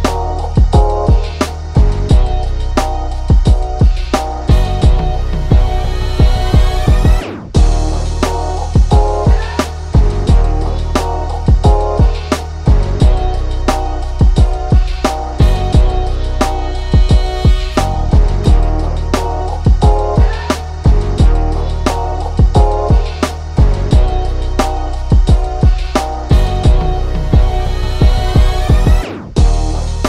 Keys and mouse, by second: 5.5 right click, 5.9 click, 10.0-12.9 drag, 14.3-17.8 drag, 18.7 ctrl+shift+[, 19.8 -, 20.7 click, 22.9 click, 27.6-28.9 drag, 29.8 click.